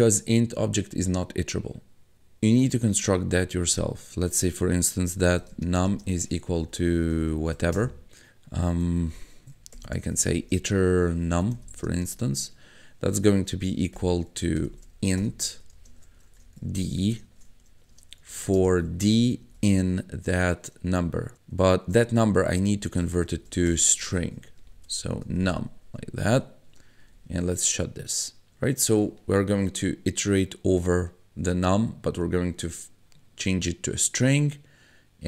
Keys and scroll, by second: 4.8-7.9 typing, 9.5-12.4 typing, 13.9-19.9 typing, 22.5-25.8 typing, 27.0 ].